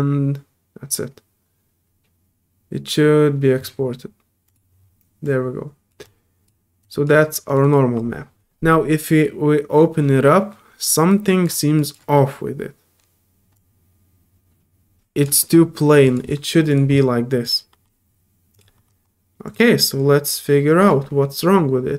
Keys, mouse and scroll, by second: 4.4 click, 5.2 click, 6.0-6.4 drag, 6.8 click, 7.4 click, 7.6 click, 11.1 click, 11.8 click, 13.2 middle click, 13.5-15.2 drag, 15.4 middle click, 16.0 click, 16.7 click, 17.4 click, 18.5 click, 19.4 click.